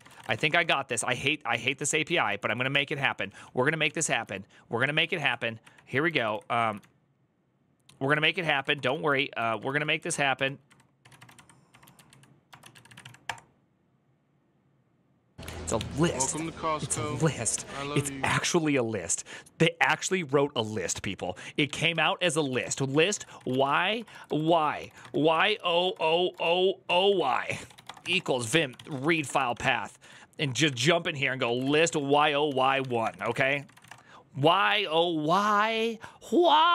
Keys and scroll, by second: 0.0-5.0 typing, 5.9 ctrl+Left, 6.1 ctrl+Left, 6.6 Right, 7.2-8.4 Right, 8.4-13.1 typing, 8.8 Right, 9.1 Left, 9.8 Right, 15.0-16.0 typing, 17.1-17.9 typing, 23.0-34.1 typing.